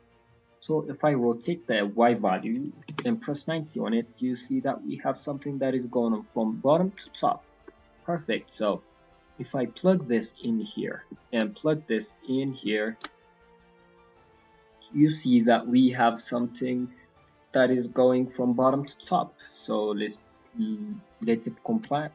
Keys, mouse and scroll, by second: 0.3 click, 1.9 click, 3.6 middle click, 4.3-4.9 scroll up 3, 4.7 middle click, 7.4 scroll down 4, 7.6 middle click, 8.0 scroll up 4, 8.3 middle click, 9.3 click, 10.8 middle click, 11.5 click, 12.9 ctrl+shift+click, 13.5 scroll down 5, 13.8 middle click, 14.3 middle click, 17.6 middle click, 19.6 middle click, 20.4 middle click, 20.7 scroll up 2, 21.6 scroll up 1, 21.6 middle click.